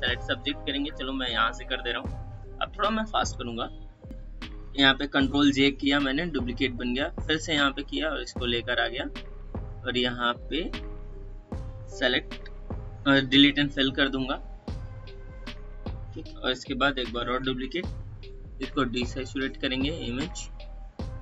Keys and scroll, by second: 5.3 ctrl+j, 16.8 ctrl+j.